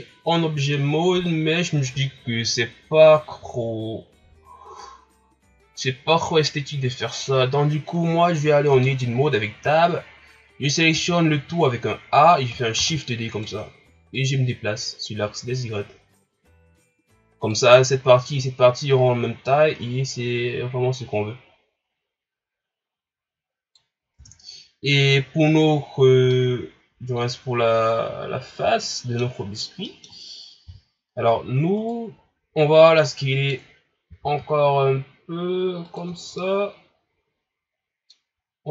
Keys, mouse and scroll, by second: 1.3-3.9 ctrl+scroll up 3, 8.2 ctrl+scroll down 4, 8.7 Tab, 9.9-10.9 ctrl+scroll up 1, 10.9 a, 12.8 shift+d, 14.1-17.2 drag, 19.5-22.5 drag, 24.2 Tab, 25.0 right click, 25.5 ctrl+scroll up 1, 26.3-29.3 middle drag, 29.9 middle click, 30.7 KP_1, 31.8 right click, 32.2 scroll up 2, 32.8 scroll down 1, 33.1-34.1 middle drag, 34.1 s, 36.4-38.5 middle drag, 38.5-38.7 scroll up 1.